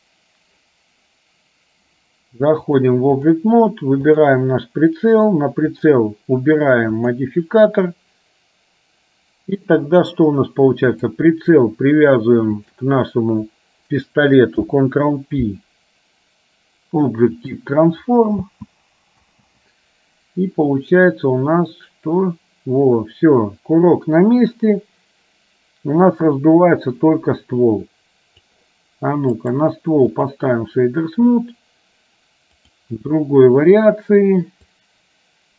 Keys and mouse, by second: 2.7 click, 12.6 shift+click, 14.6 ctrl+p, 18.6 space, 21.0-28.7 drag, 21.0 space, 29.5-30.5 right drag, 34.7-35.5 drag.